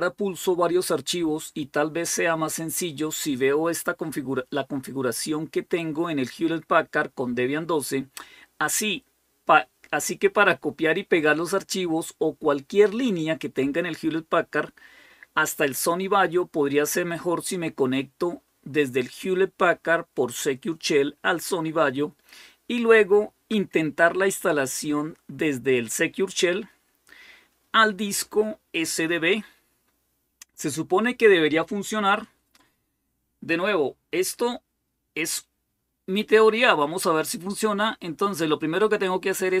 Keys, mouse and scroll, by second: 35.0-35.7 scroll down 1, 35.7-36.4 scroll down 1, 36.7-37.8 scroll down 2.